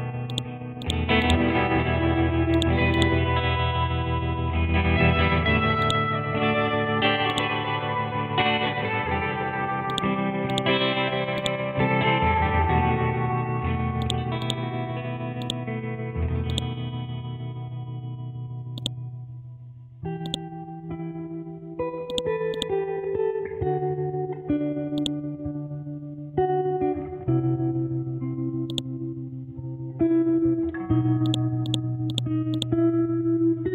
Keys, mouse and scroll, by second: 5.8-9.9 drag, 12.1-14.0 scroll up 1, 14.0 click, 17.2 scroll down 1, 18.8 click, 20.7-21.3 scroll down 1, 22.1 click, 25.0 click, 28.7-31.3 drag, 33.1 ctrl+z, 33.6-33.7 scroll up 1.